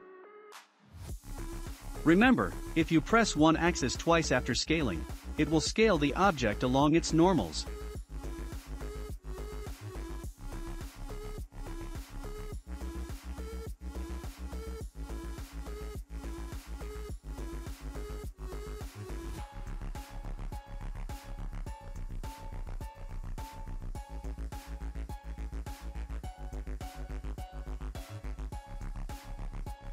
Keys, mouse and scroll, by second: 0.2 s, 5.1 click, 5.6-6.2 scroll down 5, 6.2-8.5 shift+middle drag, 8.5 click, 9.0-11.1 shift+middle drag, 11.1 shift+d, 12.7-13.4 scroll up 1, 14.2-15.6 scroll up 2, 19.8 r, 23.2 click, 26.0-26.3 scroll up 3, 26.3-29.9 middle drag.